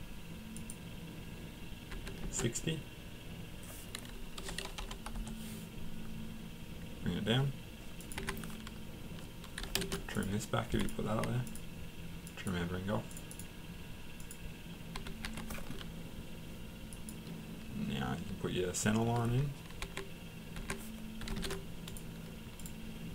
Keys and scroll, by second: 1.9 Escape, 4.4-7.8 typing, 8.2 Escape, 9.3-10.1 typing, 14.9 Escape, 15.2 Escape, 19.8 Escape, 20.6 Escape, 21.0-21.8 typing.